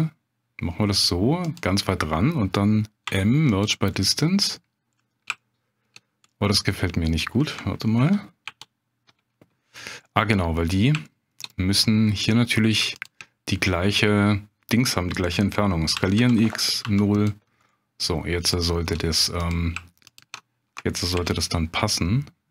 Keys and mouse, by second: 1.4 click, 3.0 m, 4.0 middle click, 5.0 middle click, 5.4 shift+middle click, 6.3 middle click, 6.8 middle click, 8.0 ctrl+z, 8.4 ctrl+z, 10.0 middle click, 11.0 shift+click, 11.5 middle click, 12.9 shift+click, 15.9 s, 16.2 x, 16.8 0, 17.1 click, 17.7 middle click, 19.5 click, 21.2 ctrl+b.